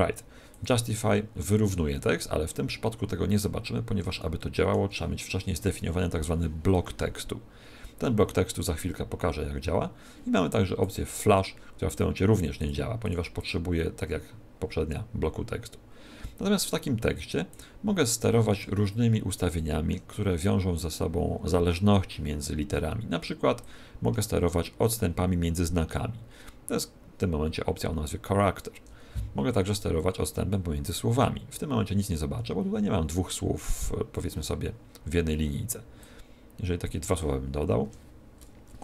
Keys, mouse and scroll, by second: 0.4 click, 3.4 scroll down 2, 4.1 shift+middle click, 10.8 click, 12.6 click, 13.3 click, 17.4 click, 18.6 shift+middle click, 23.6 click, 30.4 click, 35.9 click, 37.8 Tab.